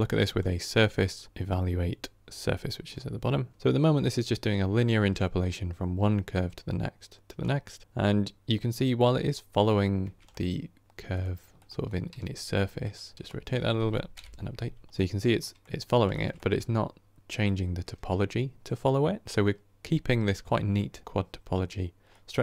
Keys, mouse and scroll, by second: 3.5-6.4 scroll up 1, 7.3-7.8 middle drag, 7.8-8.5 scroll up 1, 10.3-11.4 middle drag, 11.4 click, 12.0 r, 13.3 click, 14.0 Right, 14.7-19.5 middle drag, 21.0-22.4 middle drag.